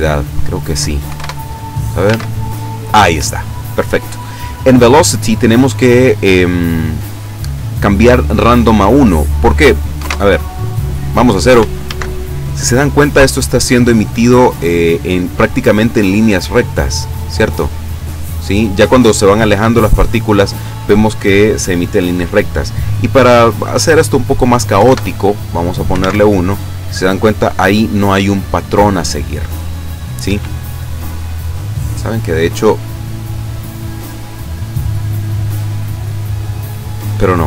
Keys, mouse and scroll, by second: 1.1 KP_1, 1.2 KP_Enter, 2.1 alt+a, 3.1 Escape, 9.1 click, 9.9 KP_0, 10.1 Return, 11.8 alt+a, 16.8 click, 19.6 Escape, 23.5 click, 24.8 KP_1, 24.9 KP_Enter, 26.1 alt+a, 30.3 Escape, 32.2-33.1 scroll up 4.